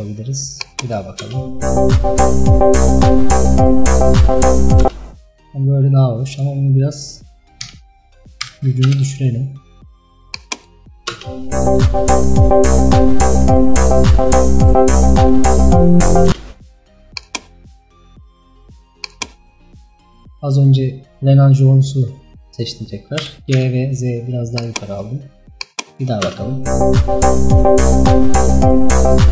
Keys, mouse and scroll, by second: 1.2 space, 4.9 space, 8.9-11.2 drag, 11.2 space, 16.4 space, 17.3 click, 19.2 click, 22.0-22.5 scroll down 1, 23.3 g, 25.6 click, 26.2 space.